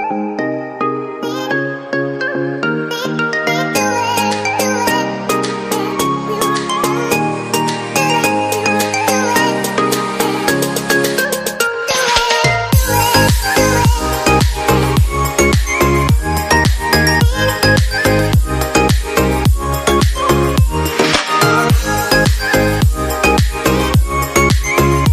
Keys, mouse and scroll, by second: 1.3 ctrl+r.